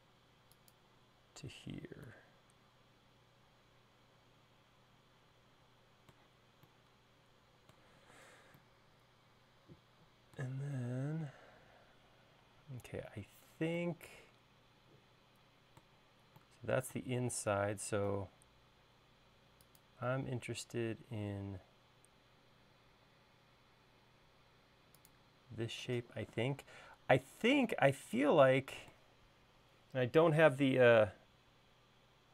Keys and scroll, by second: 8.4 space, 17.6 l.